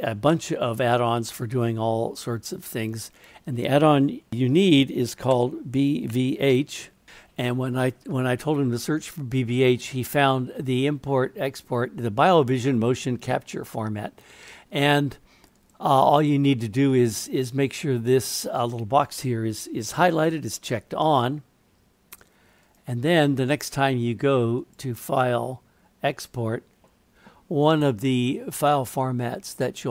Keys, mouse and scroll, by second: 24.7-29.9 drag.